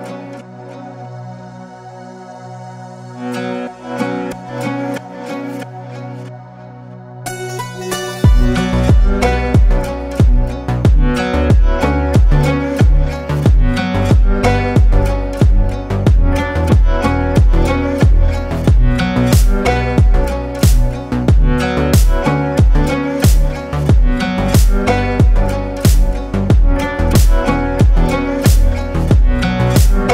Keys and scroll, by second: 2.9 ctrl+2, 8.3 Delete, 11.3 ctrl+space.